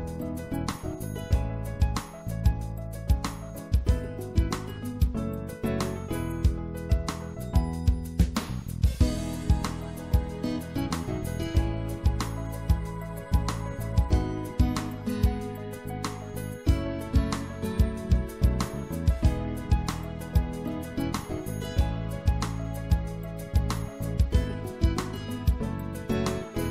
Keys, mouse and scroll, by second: 0.6 click, 3.8-5.2 drag, 5.2 middle click, 5.9 middle click, 6.1-7.2 middle drag, 9.0 ctrl+z, 10.3-12.0 drag, 12.5-14.4 drag, 15.7-16.7 drag, 16.7-17.8 right drag, 17.8 click, 18.3-21.4 middle drag, 21.4-23.5 drag, 23.5 s.